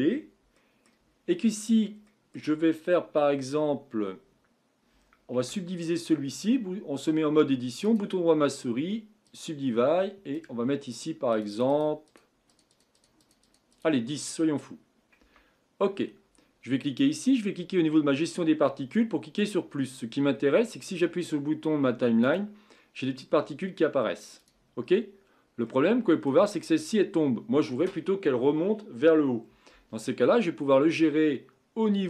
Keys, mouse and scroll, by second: 1.1-2.0 scroll up 3, 2.0-5.4 middle drag, 5.4 Tab, 7.8-10.3 right drag, 10.3-15.2 drag, 15.2 Tab, 16.8 click, 19.4 click, 20.3-20.9 scroll down 1, 20.9-21.2 scroll down 2, 22.2-24.8 drag, 24.8-25.6 scroll up 5, 25.6 scroll up 1, 25.8-26.5 middle drag, 26.5-29.2 scroll down 3, 30.1-31.4 scroll down 6.